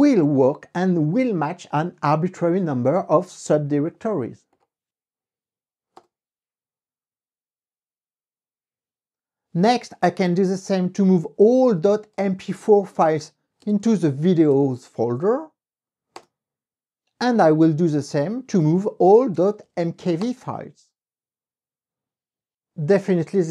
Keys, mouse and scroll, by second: 1.0-3.5 drag, 4.8 click, 6.3 KP_Enter, 9.8 Up, 11.0 BackSpace, 12.7-15.1 typing, 16.5 KP_Enter, 17.2 Up, 17.3 Left, 18.9 BackSpace, 19.6 k, 20.5 KP_Enter.